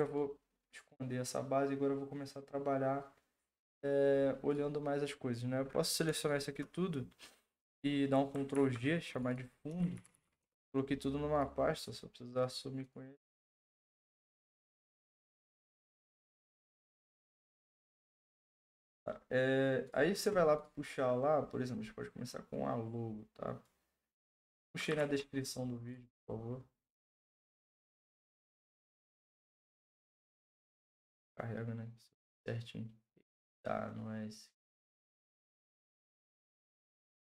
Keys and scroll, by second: 8.5 ctrl+g, 9.5-10.7 typing, 25.0 ctrl+c, 27.5 ctrl+v, 28.6 Return.